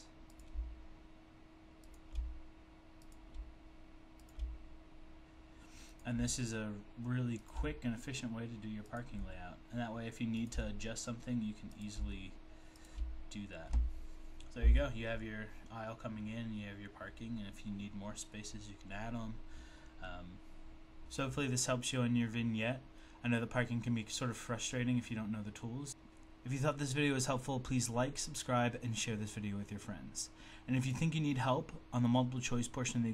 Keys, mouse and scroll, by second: 1.9 shift+click, 4.2 click, 7.4 click, 10.4 shift+click, 12.8 shift+click.